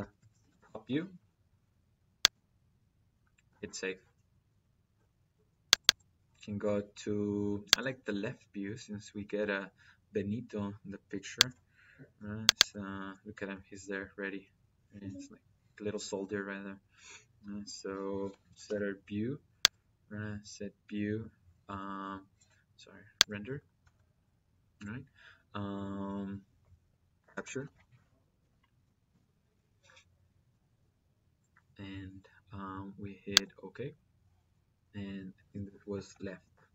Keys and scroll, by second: 0.3 o, 0.4 p, 27.0-27.7 typing, 28.2 Down, 28.9 Return, 35.8-36.7 typing.